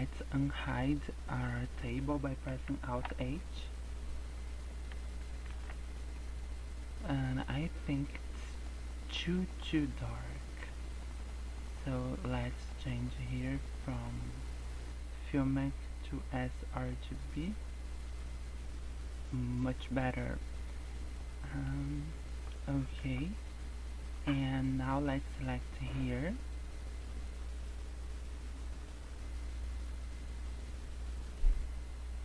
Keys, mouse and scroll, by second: 2.9 alt+h, 5.5 alt+a, 6.3 scroll down 4, 6.6 scroll up 5, 9.8 scroll down 1, 10.4 scroll up 1, 10.8 scroll down 1, 11.2 middle click, 12.6 scroll up 1, 12.8 middle click, 13.9 click, 15.3 click, 17.6 scroll up 3, 19.3 scroll down 4, 19.8-20.2 scroll up 3, 21.2 middle click, 23.1 KP_0, 24.5 Tab, 26.4 scroll up 2.